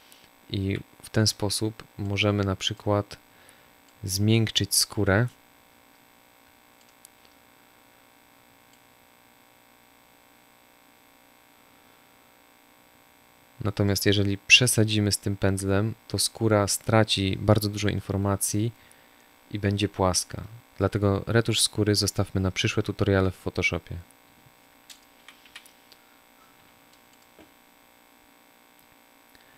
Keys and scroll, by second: 0.6 z, 1.8 space, 5.8 space, 19.9 space, 26.3 Delete.